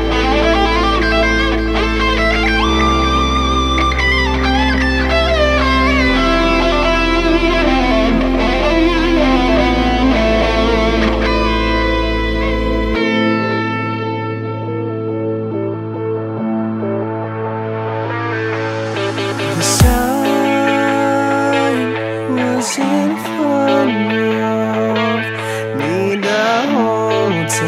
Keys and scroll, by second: 8.8 ctrl+z.